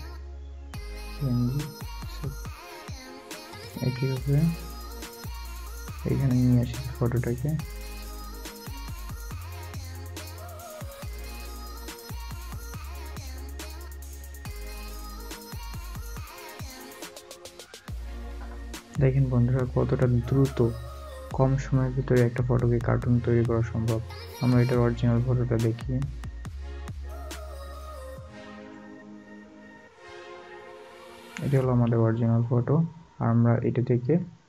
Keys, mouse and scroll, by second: 6.3 space, 7.1 space, 11.5 space, 11.6 double click, 12.6 alt+scroll up 1, 17.5 alt+scroll up 1, 17.9 alt+scroll down 1, 19.2 alt+scroll up 1, 21.3-21.7 alt+scroll down 1, 29.6 alt+scroll down 1, 29.6 double click.